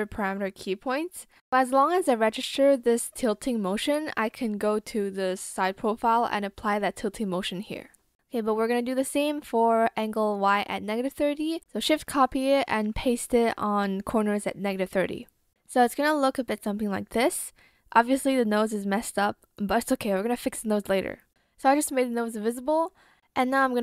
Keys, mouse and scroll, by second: 8.9 ctrl+shift+c, 11.6 ctrl+shift+v.